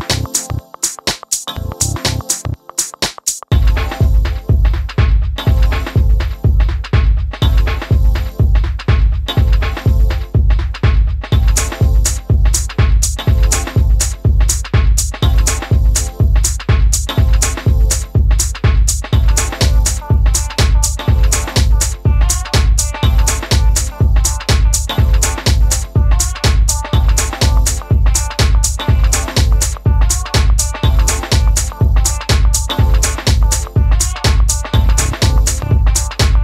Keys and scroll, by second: 4.2 super+z, 6.4 d, 27.6 Down, 27.9 Down, 30.4 Left, 31.4 Down, 34.1 Right, 34.5 Down.